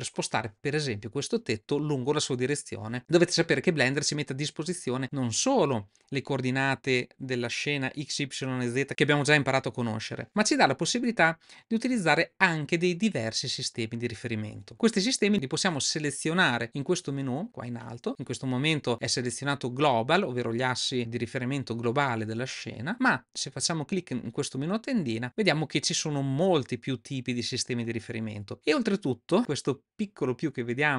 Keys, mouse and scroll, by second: 24.5-30.9 drag.